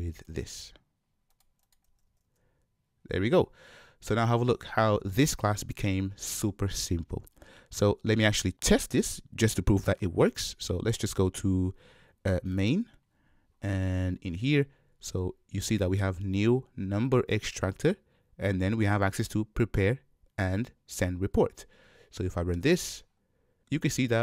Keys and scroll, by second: 22.8 shift+F10.